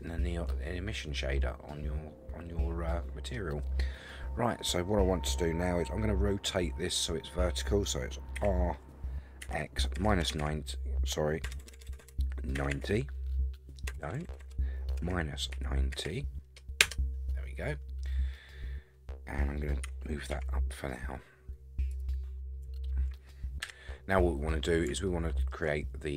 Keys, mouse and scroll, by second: 0.1-3.3 middle drag, 6.5-7.8 middle drag, 8.4 r, 17.7-18.3 scroll down 1, 18.3-19.4 middle drag, 19.8 g, 22.2-22.6 scroll down 5, 22.7-23.2 shift+middle drag, 23.6 KP_1, 24.3 scroll up 5, 25.1-25.5 shift+middle drag.